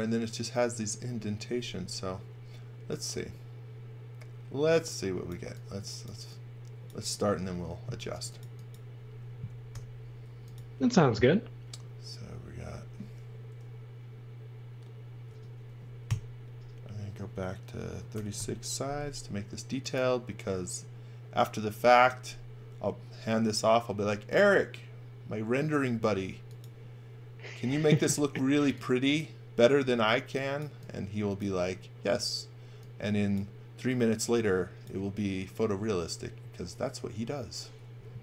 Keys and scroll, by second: 4.7 x, 7.0 space, 9.7 i, 15.3 space, 16.1 i, 17.7-18.6 typing, 28.2 e.